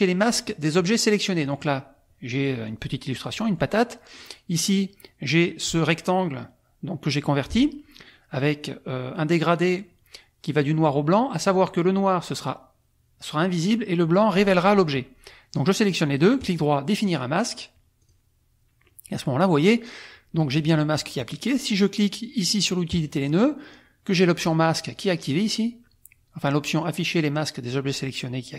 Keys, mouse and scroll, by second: 0.4 click, 1.4 click, 2.7 click, 4.2 click, 5.6 F2, 7.5 F1, 15.5 click, 16.3 right click, 18.0 click, 18.9 click, 22.9 click, 24.3 click, 24.9 click.